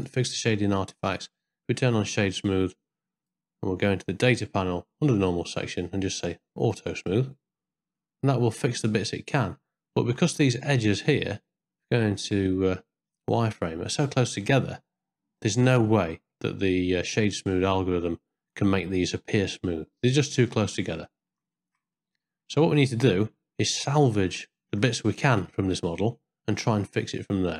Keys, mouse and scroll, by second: 0.0-1.2 right drag, 1.9 shift+middle click, 5.1 click, 5.5 middle click, 6.6 click, 8.0 scroll up 1, 8.1-9.6 middle drag, 9.9 ctrl+middle click, 11.4 z, 12.2 z, 12.8-13.9 middle drag, 15.4 scroll up 1, 15.5 middle click, 21.1 ctrl+scroll up 1, 21.2 ctrl+middle click, 21.6 shift+middle click, 21.9 middle click, 23.9 z, 24.6 ctrl+middle click, 25.2 shift+middle click, 25.6-27.5 middle drag.